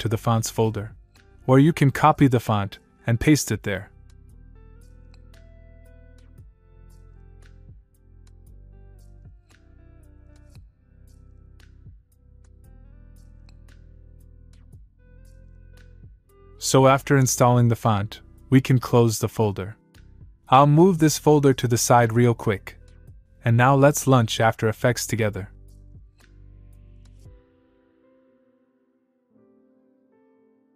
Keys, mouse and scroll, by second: 17.2 click, 19.1 click, 22.0-23.7 click, 27.4 click.